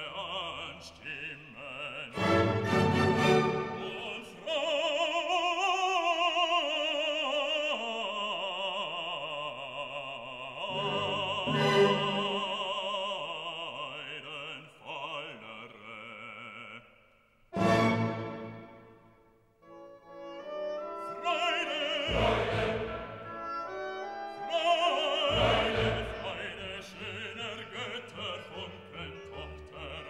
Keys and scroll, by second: 19.3 ctrl+alt+z.